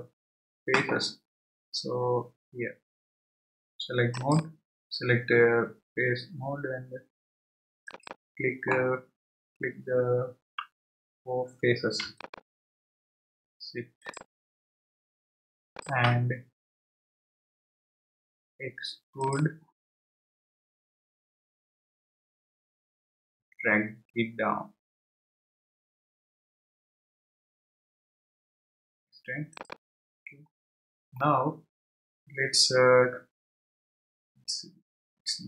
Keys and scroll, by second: 21.5 e.